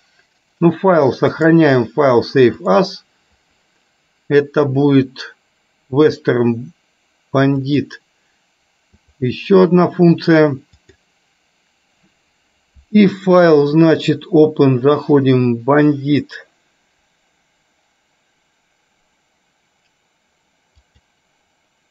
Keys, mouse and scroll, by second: 1.5-3.0 drag, 10.9-21.9 drag.